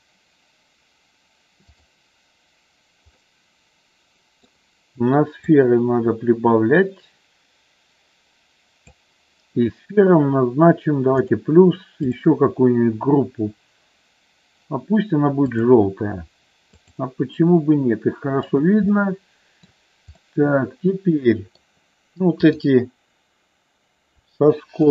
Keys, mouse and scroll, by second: 1.8 click, 3.2-4.6 middle drag, 5.4-8.9 drag, 11.3 click, 12.1-15.8 drag, 16.7 click, 17.4-18.5 middle drag, 19.0 middle click, 20.3-21.7 middle drag, 22.5-23.8 drag, 24.8-24.9 shift+drag.